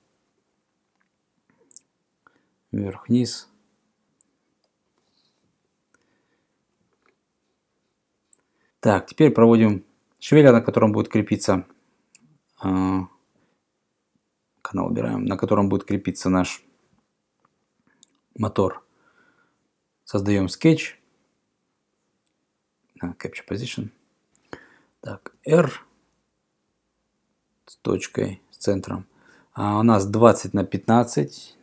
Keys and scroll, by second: 25.3 r, 30.9-31.6 typing.